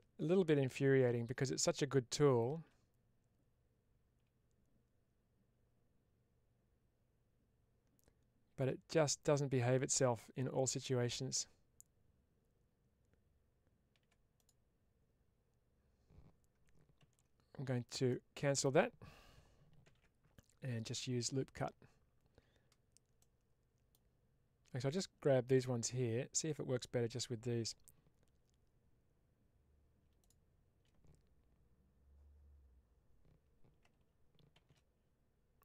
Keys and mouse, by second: 17.1 ctrl+z, 17.9 middle click, 23.0 middle click, 24.8 click, 25.4 click, 30.1 shift+click.